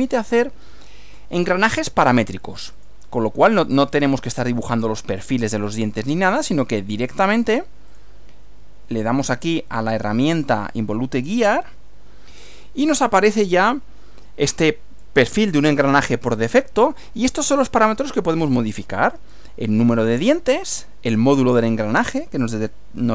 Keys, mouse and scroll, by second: 0.1 click, 2.8 click, 3.9 click, 4.7 click, 5.3 click, 6.3 click, 7.3 click, 7.9 click, 8.9-9.6 drag, 11.1 click, 12.9-15.2 middle drag.